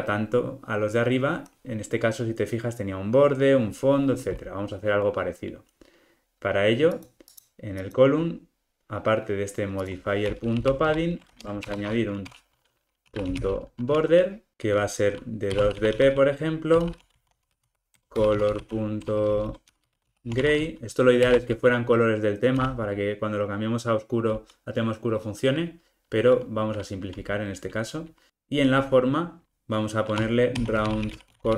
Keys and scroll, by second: 14.5 Return, 21.3 Return.